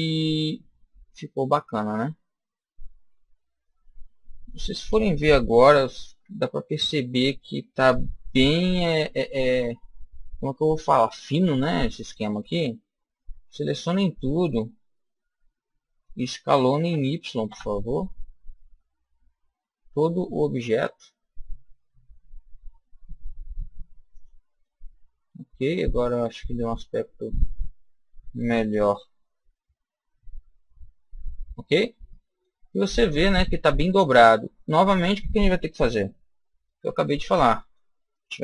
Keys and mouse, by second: 3.6-5.4 middle drag, 6.0 KP_1, 8.3 KP_3, 9.5-11.6 middle drag, 11.8 middle click, 12.8 a, 13.2 a, 16.8 s, 24.1 click, 24.5-26.4 middle drag, 26.5-28.7 middle drag, 28.7 a, 29.7-31.1 middle drag, 31.3 middle click, 31.4 middle click, 32.5-38.4 middle drag.